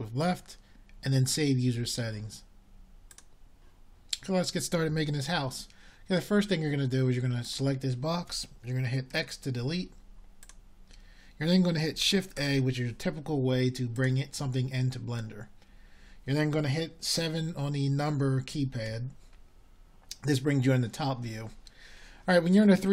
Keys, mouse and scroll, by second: 8.3 click, 10.0 x, 13.3 shift+a, 20.0 KP_7.